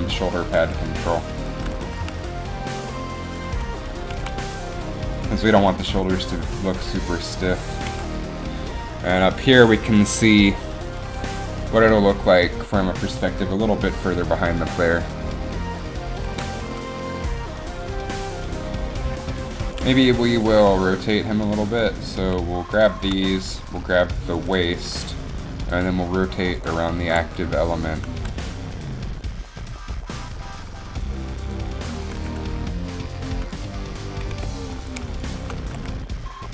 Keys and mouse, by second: 0.6 r, 1.7 r, 1.8 r, 4.2 a, 8.1 KP_1, 8.1 KP_1, 27.2 r, 28.3 r, 32.1 r, 34.4 c, 35.7 r.